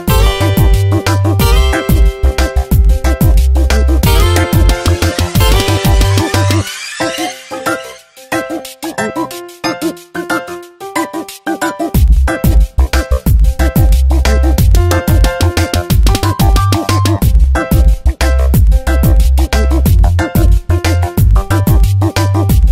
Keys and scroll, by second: 3.0 space, 3.7 b, 6.2 space, 7.7 space, 10.8 Tab, 17.6 space, 21.9 space.